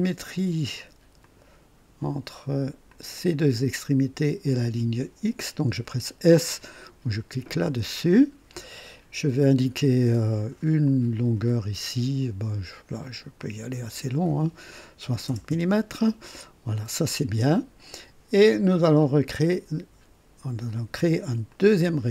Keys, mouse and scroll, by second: 1.2 click, 2.9 click, 4.4 click, 7.6 s, 10.8 click, 13.4 click, 15.0 KP_6, 15.5 KP_0, 15.5 KP_Enter, 19.0 click, 21.5 click.